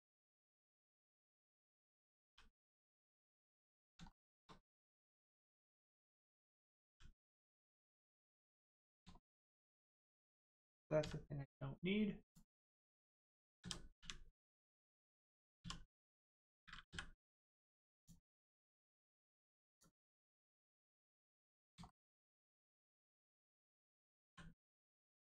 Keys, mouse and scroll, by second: 1.2 shift+middle click, 2.2 g, 2.8 right click, 3.2 middle click, 3.4 scroll up 1, 4.1 shift+middle click, 4.8 middle click, 4.9 middle click, 5.2 scroll up 1, 5.6 middle click, 6.8 g, 7.7 right click, 8.1 middle click, 9.2 shift+middle click, 9.6 scroll up 1, 9.9 middle click, 12.2 click, 14.0 u, 15.6 1, 16.9 m, 17.9 click, 21.0 middle click, 21.9 shift+middle click, 23.1 click, 24.3 l, 25.1 click.